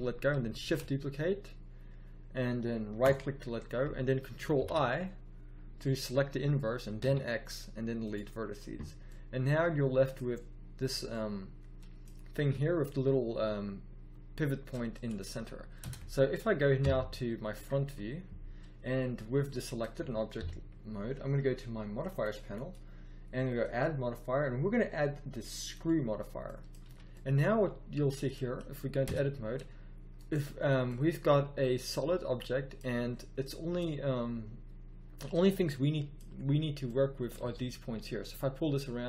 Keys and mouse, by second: 0.5 shift+d, 4.5 ctrl+i, 6.9 x, 8.0-9.2 drag, 13.1 middle click, 15.7 Tab, 16.7 KP_1, 20.3 KP_1, 25.4-26.4 middle drag, 26.7 z, 29.0 Tab, 32.9 middle click, 35.3 middle click, 37.4 g.